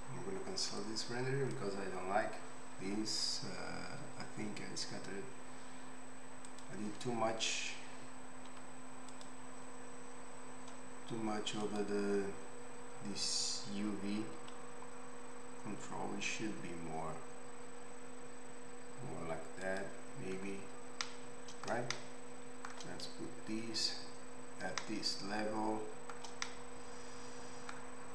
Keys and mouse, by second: 6.6-11.6 middle drag, 8.5 z, 11.6 click, 11.9-28.1 middle drag, 14.4 s.